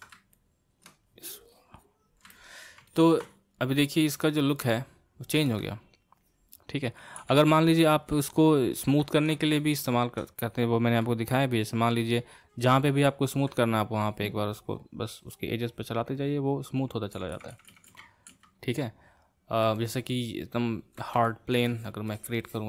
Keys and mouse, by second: 0.3 middle click, 1.1-2.3 drag, 2.3-6.3 middle drag, 6.3-7.3 drag, 7.3 ctrl+z, 8.3-14.0 ctrl+middle drag, 14.0-17.3 drag, 17.3 ctrl+z, 17.5 ctrl+z, 17.7 ctrl+z, 17.8 ctrl+z, 18.0 ctrl+z, 18.4 ctrl+z, 19.8-21.7 middle drag, 21.7-22.6 drag.